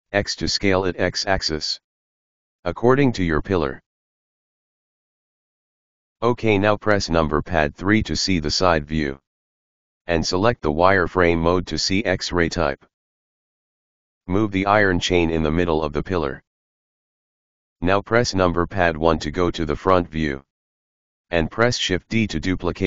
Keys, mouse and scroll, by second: 6.1 KP_3, 9.2 click, 10.2-13.2 middle drag, 13.8-15.3 middle drag, 15.3 KP_3, 16.9 click, 18.0 g, 19.3 KP_1, 21.7 shift+d.